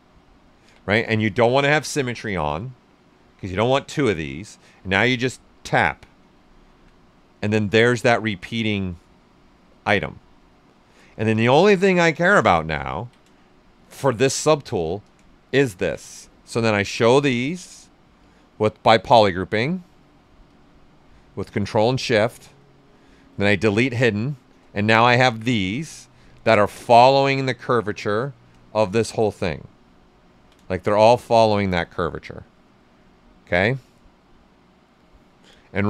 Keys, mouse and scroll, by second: 0.6 x, 5.5 click, 6.4 alt+right click, 7.5 shift+f, 8.0 ctrl+right click, 9.8 click, 10.8 click, 10.9 shift+f, 12.8 ctrl+click, 13.7 shift+f, 14.2 ctrl+right click, 15.4 ctrl+shift+click, 16.1 ctrl+right click, 18.2-20.4 drag, 24.0 right click, 25.0 typing, 25.6 click, 26.2 ctrl+right click, 27.9 shift+f, 28.6 shift+f, 28.9 right click, 29.6 ctrl+right click, 30.8 shift+f, 32.4-35.8 drag.